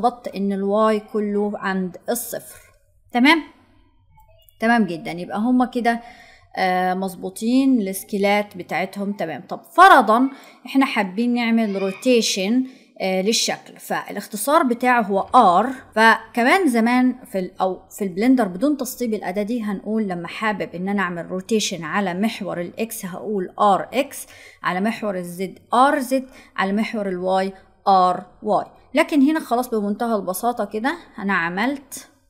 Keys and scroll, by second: 15.3 r.